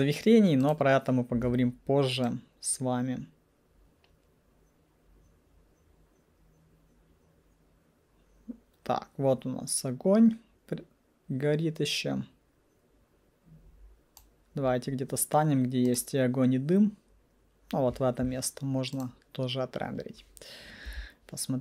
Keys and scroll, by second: 20.9 F9.